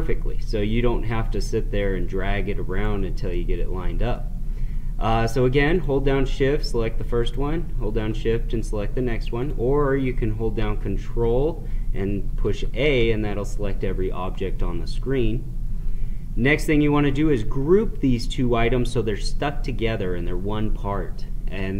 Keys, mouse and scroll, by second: 3.2-5.7 middle drag, 5.7 shift+click, 9.4 click.